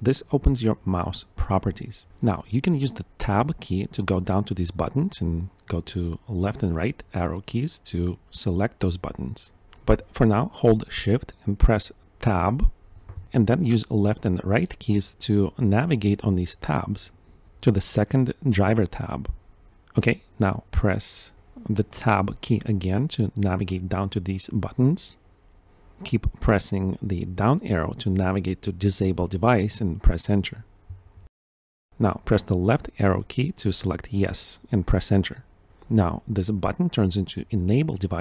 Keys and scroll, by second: 1.3 Right, 2.1 Tab, 3.7 Right, 4.0 Left, 4.2 Right, 4.4 Left, 5.1 Left, 5.6 Right, 6.7 Tab, 12.4 shift+Tab, 19.9 Right, 22.0 Tab, 22.8 Down, 23.9 Up, 24.5 Tab, 31.2 Tab, 31.4 Return, 32.0 Left, 32.4 Right, 32.7 Left, 33.2 Right, 34.2 Return.